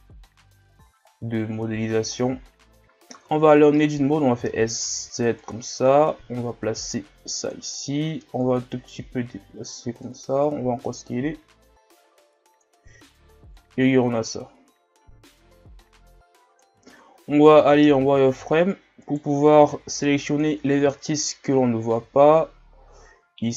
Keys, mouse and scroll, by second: 0.7 shift+scroll down 1, 1.0-1.7 scroll up 2, 1.7 scroll up 1, 1.7 shift+scroll down 1, 2.3-3.1 scroll up 1, 3.1 Tab, 4.3 s, 6.1-10.4 drag, 10.4 s, 13.5-16.9 drag, 16.9 shift+scroll down 2, 18.0 z, 18.4 shift+scroll down 2, 19.0 right click, 19.6 b, 21.0-21.7 shift+scroll down 1, 21.9 s.